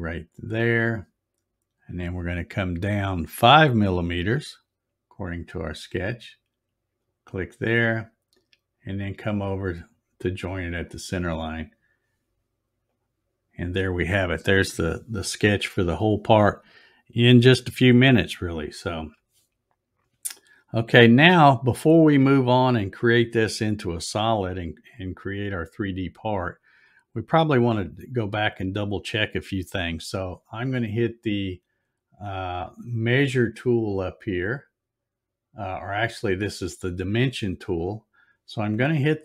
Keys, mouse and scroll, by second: 0.5 click, 7.0 click, 10.6 click, 12.9 click, 37.7 click.